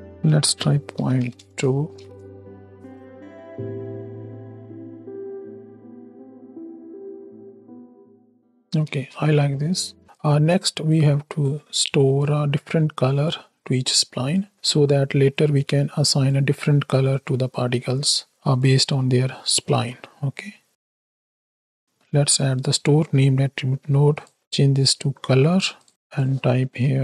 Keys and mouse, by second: 0.0-1.4 drag, 0.0 space, 1.8 shift+Right, 1.9 shift+Left, 2.5 space, 3.2-3.5 drag, 8.8 space, 9.4 click, 10.1-12.2 drag, 12.6-13.2 drag, 13.8 click, 15.6 right click, 16.6 right click, 17.1-18.7 right drag, 19.0 middle click, 19.6 shift+a, 24.2-25.9 drag, 26.0-27.0 drag.